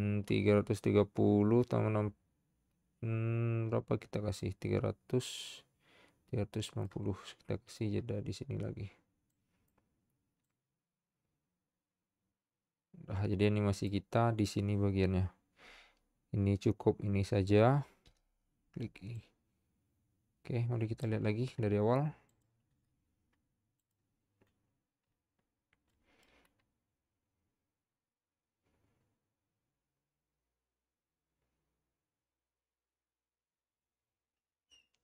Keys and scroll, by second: 18.2 typing.